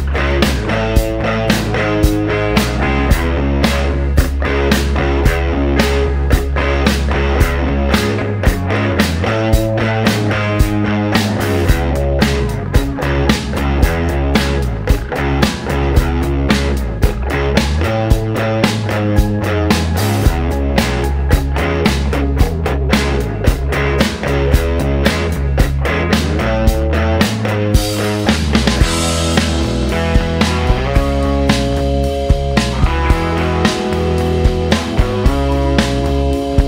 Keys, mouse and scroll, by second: 0.4-0.9 scroll down 1, 0.9-1.9 middle drag, 3.0 middle click, 4.1 middle click, 6.7-13.0 drag, 13.3 middle click, 14.5 middle click, 16.6 click, 18.1 click, 19.7 a, 21.1-22.1 typing, 24.2-26.4 drag, 26.6 middle click, 28.9 click, 29.9 click, 30.6 a, 32.1-33.0 typing, 35.5-36.5 middle drag.